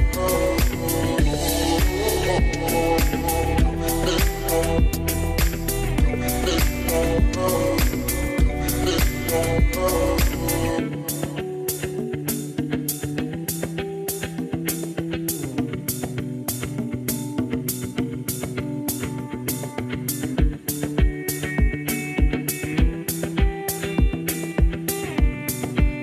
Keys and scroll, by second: 17.1-18.0 typing.